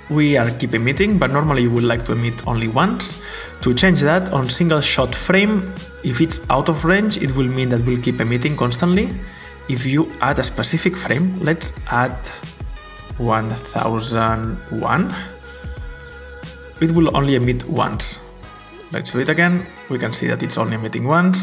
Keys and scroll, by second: 13.2-15.1 typing, 15.0 Return, 17.9 typing, 19.1 typing.